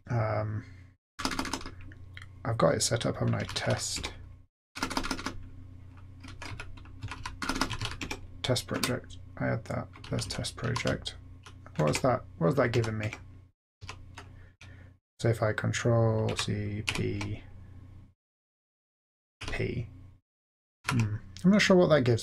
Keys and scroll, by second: 1.2 typing, 3.1-8.3 typing, 8.7 Return, 10.0 Down, 10.2 Down, 10.6 Up, 10.8 Down, 11.4 Down, 11.9 Tab, 12.7 Down, 13.0 Tab, 13.8 Up, 16.3 ctrl+c, 16.8 ctrl+p, 19.4 p, 20.6-22.0 typing.